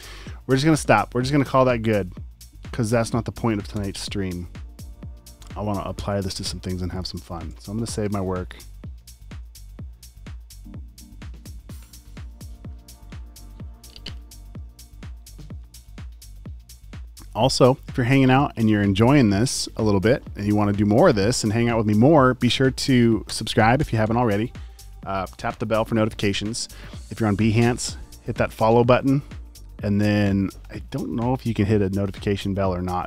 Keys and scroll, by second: 3.8 super+g, 6.5 space, 7.0 alt+super+space, 9.0 Escape, 9.6 super+s.